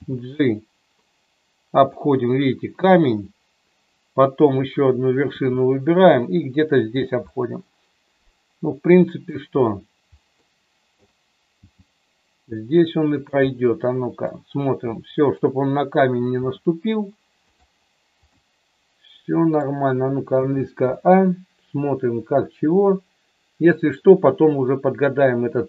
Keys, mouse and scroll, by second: 0.0 g, 1.7 click, 4.5 click, 5.3 g, 6.9 click, 7.2-9.3 middle drag, 10.5 middle click, 11.6 g, 13.1 click, 13.3 middle click, 14.8 middle click, 16.5 g, 17.5 click, 18.3-19.4 middle drag, 20.3 a, 20.9-24.0 middle drag.